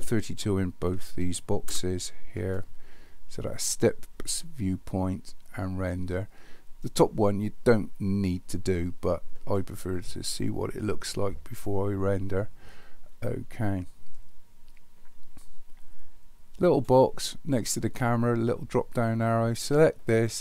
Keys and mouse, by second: 19.5-20.4 drag.